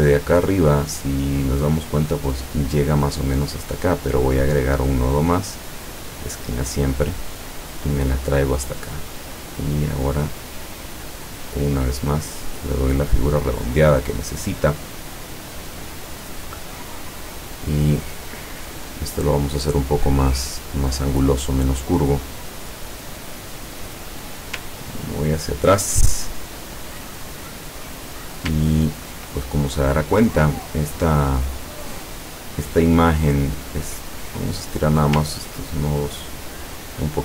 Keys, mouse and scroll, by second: 4.4 click, 6.1 click, 7.4-8.8 drag, 9.6-13.2 drag, 18.2-19.7 drag, 20.3-21.5 drag, 25.0-25.7 ctrl+scroll down 2, 27.2-28.3 drag, 28.7 ctrl+scroll down 2, 34.0 click, 35.3-37.2 ctrl+drag.